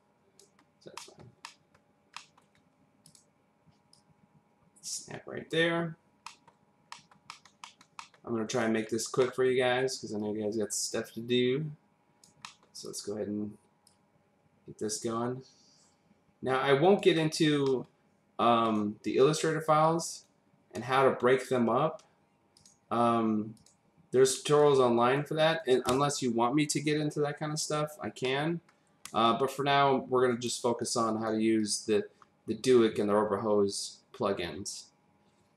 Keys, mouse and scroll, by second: 1.0 middle click, 1.4 middle click, 2.1 middle click, 2.5-3.0 scroll up 1, 3.0 click, 3.9 click, 5.9-6.2 scroll down 1, 6.2 middle click, 6.6-6.9 scroll down 1, 6.9 middle click, 7.3 middle click, 7.6 middle click, 8.0 middle click, 8.5 click, 8.9-9.2 scroll up 1, 9.2 middle click, 10.2 click, 12.4 middle click, 12.8 click, 13.8 click, 17.2-17.6 scroll down 1, 17.6 middle click, 18.6 click, 19.8 click, 22.5 click, 23.5 click, 24.6 click, 28.2 middle click, 29.0-30.4 typing, 29.2 click, 30.8 click, 31.6 click.